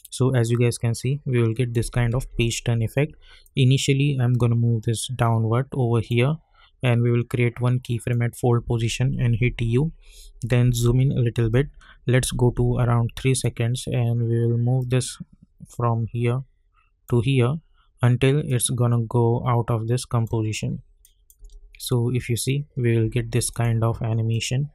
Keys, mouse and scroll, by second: 2.1 ctrl+z, 3.4-8.0 drag, 9.4-11.5 typing, 13.1-17.4 drag, 17.4-18.4 scroll down 1, 18.4-21.0 drag, 21.3 space, 23.5 click.